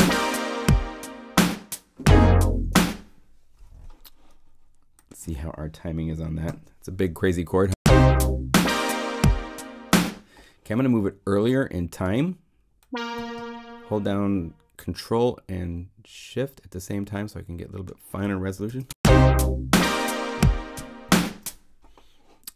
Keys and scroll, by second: 2.7 0, 6.4 p, 7.4 0, 7.6 Home, 9.9 0, 18.6 ctrl+shift+0, 18.8 Return, 21.2 0.